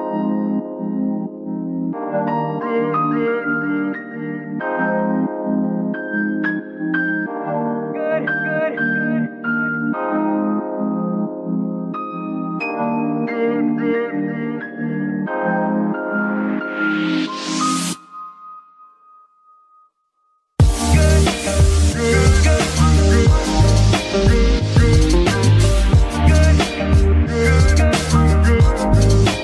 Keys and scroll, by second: 0.0 Escape, 1.0 ctrl+Tab, 8.6 ctrl+Tab, 17.6 ctrl+Tab, 18.9 g, 19.5 Escape, 23.3 ctrl+Tab, 26.8 g, 27.0 y, 28.4 Escape.